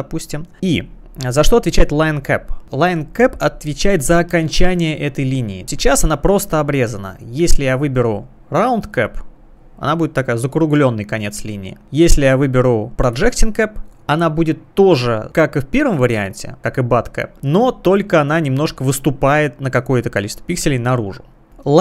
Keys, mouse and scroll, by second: 0.5 click, 2.4 click, 7.7 click, 9.0 click, 12.9 click, 13.2 click, 16.0 click, 16.6 click, 17.7 click, 18.4 click, 21.6 click.